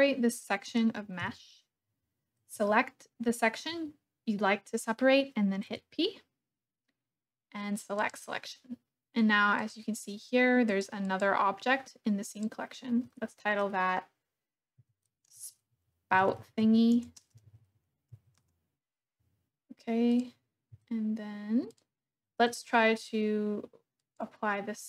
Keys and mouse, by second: 1.2 KP_1, 2.6-3.7 shift+drag, 5.7 p, 9.6 click, 10.7 click, 11.0 click, 12.3 click, 14.8 F2, 20.0 click, 20.7 Tab, 23.9 click.